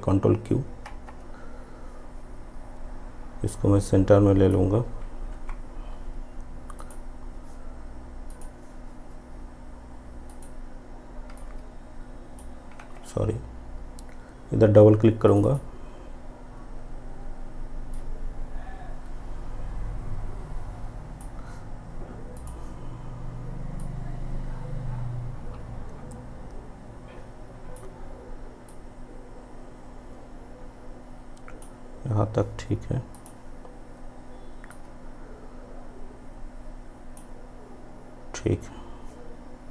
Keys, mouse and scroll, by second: 0.9 ctrl+q, 3.6-5.4 drag, 5.4 p, 6.9-12.9 drag, 12.9 ctrl+z, 15.4 click, 18.0-39.6 drag.